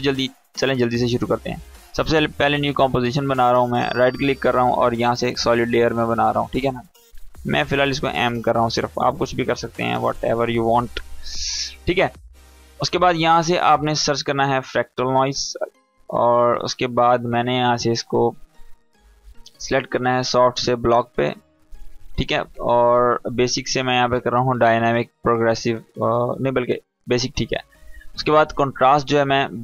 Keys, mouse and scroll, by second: 3.3 right click, 3.6 click, 7.1 m, 8.9 BackSpace, 8.9 Caps_Lock, 9.4 m, 10.3 Return, 10.5 Caps_Lock, 11.6 click, 13.5-14.8 typing, 15.5-16.4 drag.